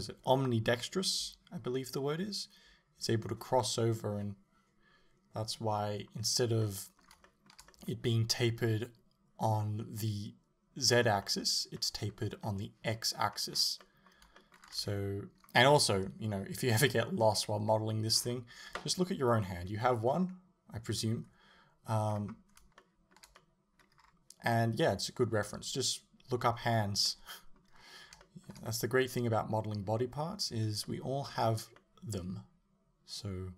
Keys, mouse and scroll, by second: 13.5-13.9 scroll down 2, 14.8 a, 18.2-21.7 scroll up 1, 22.1-22.9 scroll down 1, 22.9 shift+middle click, 23.4 middle click, 24.0-26.6 scroll down 1, 26.6 middle click, 26.6-27.0 scroll up 1, 27.8-28.3 scroll down 1, 28.3 shift+middle click, 28.7 middle click, 31.1-33.5 middle drag.